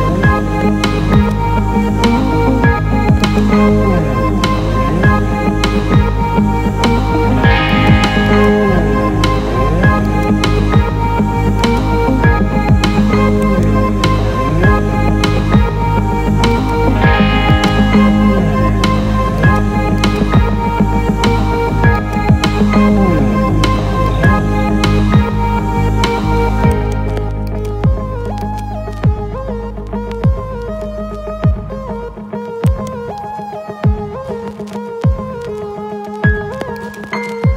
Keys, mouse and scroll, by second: 2.4 Tab, 3.2 click, 4.7 r, 5.1 x, 5.8 KP_9, 6.1 KP_0, 6.7 Return, 7.6-8.1 ctrl+alt+middle drag, 8.3 alt+middle click, 10.1-10.7 alt+middle drag, 11.7-12.3 drag, 13.4-16.7 right drag, 17.5-19.2 alt+middle drag, 19.4-20.5 ctrl+alt+middle drag, 21.1 Tab, 21.9 ctrl+alt+middle click, 24.0 click, 25.3 g, 26.7 right click, 27.4 alt+middle click, 28.5 middle click, 30.7 a, 32.6-37.0 right drag.